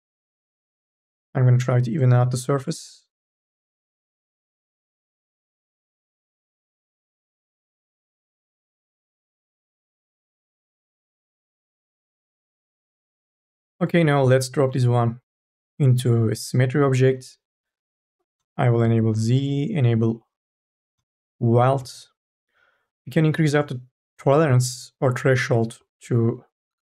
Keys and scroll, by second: 10.7 e.